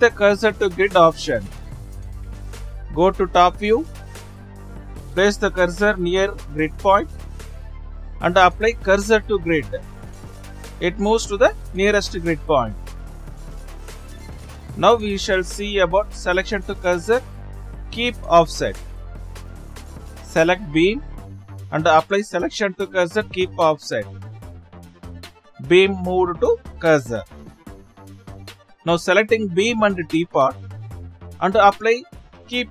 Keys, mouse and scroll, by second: 3.1 shift+s, 3.4-4.6 middle drag, 5.0-6.5 drag, 6.5 shift+s, 7.8-10.8 drag, 12.5 shift+s, 13.6-14.5 middle drag, 14.5 shift+s, 20.8-24.5 drag, 25.7 shift+s, 29.3-29.9 scroll up 2, 30.1 click.